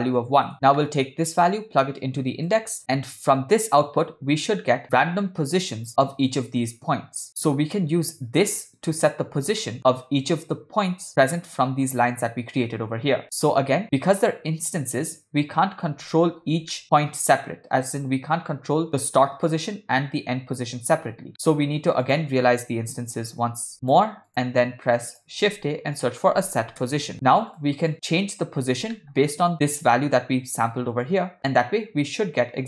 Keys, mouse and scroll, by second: 0.8 middle click, 1.5-2.6 drag, 2.8 ctrl+middle click, 3.8-5.9 drag, 7.3 middle click, 9.6 middle click, 9.8 click, 13.2 middle click, 13.8 scroll down 1, 16.1-16.5 shift+middle drag, 16.8 ctrl+middle drag, 21.3 middle click, 21.5 shift+a, 24.4 middle click, 25.0 click, 25.5 shift+a, 29.0 ctrl+middle click, 29.5-30.4 scroll up 1, 31.1-32.6 drag.